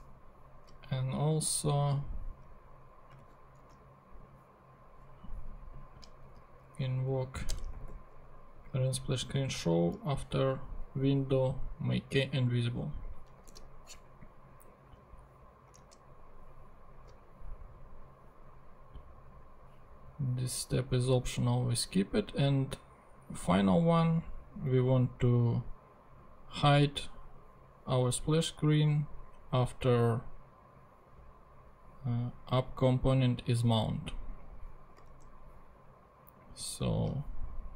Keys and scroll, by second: 3.3 super+c, 3.7 super+Tab, 6.2 Return, 7.1 Up, 7.5 Return, 7.9 super+v, 13.5 super+s, 15.9 super+Tab, 35.1 super+Tab.